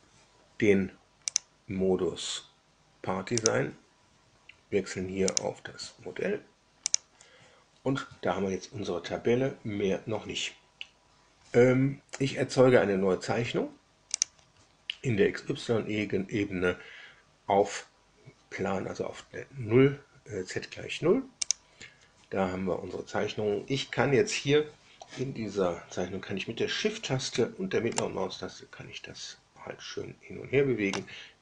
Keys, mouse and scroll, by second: 1.2 click, 3.3 click, 5.2 click, 6.8 click, 14.1 click, 21.4 click, 27.9-31.0 shift+middle drag.